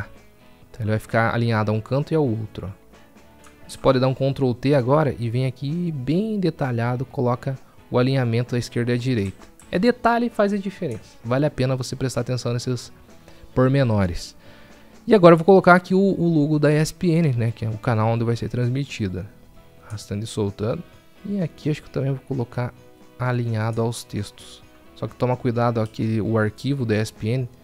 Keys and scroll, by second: 4.1 ctrl+t.